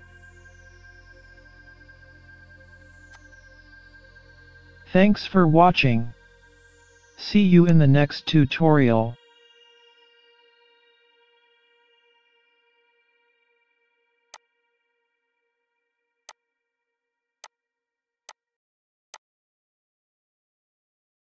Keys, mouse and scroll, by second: 1.0 scroll down 4, 1.2-1.7 scroll up 2, 1.6 middle click, 2.2 middle click, 3.1 click, 4.4 scroll up 1, 4.5 middle click, 6.0 scroll up 2, 6.4 middle click, 7.7 click, 11.2 scroll up 1, 11.5 middle click, 12.4-12.8 scroll down 4, 12.9 scroll up 3, 14.4 click, 16.3 click, 17.5 click, 18.3 click, 19.4 click, 19.9 scroll up 1.